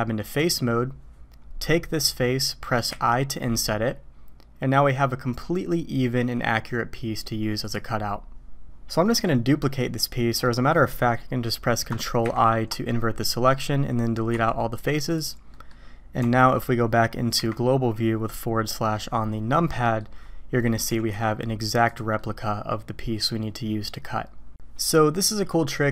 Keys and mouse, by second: 0.2 click, 2.9 i, 9.0 middle drag, 9.8-10.4 middle drag, 12.2 ctrl+i, 14.3 x, 15.5 click, 16.2 Tab, 19.8 drag, 20.6 click, 20.9 g, 22.1-23.3 drag.